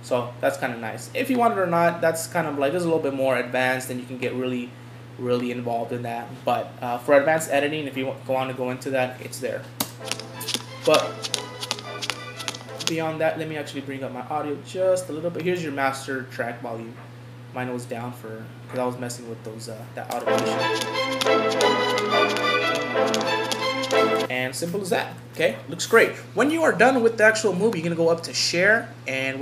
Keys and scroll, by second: 25.2 Home.